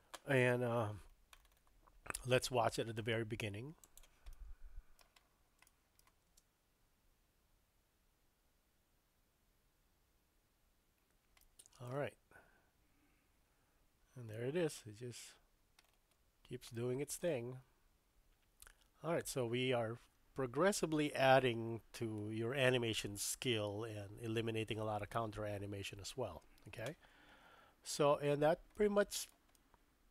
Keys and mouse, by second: 2.5 shift+middle click, 3.8 click, 4.3-5.0 middle drag, 5.7-6.0 shift+middle drag, 6.3 space, 11.4-11.9 shift+middle drag, 14.3-16.5 middle drag, 16.7-26.9 middle drag, 20.2 space, 28.7-29.3 shift+middle drag, 29.5-30.1 middle drag.